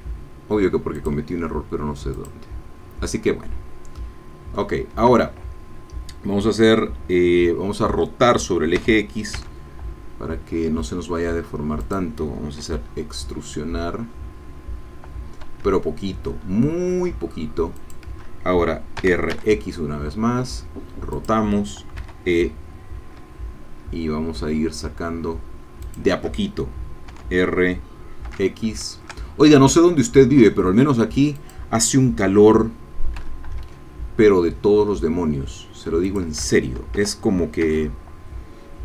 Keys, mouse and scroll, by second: 1.2 click, 2.1 click, 4.0-5.0 middle drag, 8.8 r, 9.3 x, 11.8 click, 12.6 e, 17.8 shift+click, 19.0 r, 19.3 x, 21.1 click, 22.0 e, 25.9 shift+click, 27.1 r, 28.3 x, 31.4-33.2 drag, 33.2 e, 36.1 shift+click, 36.9 r, 37.6 x.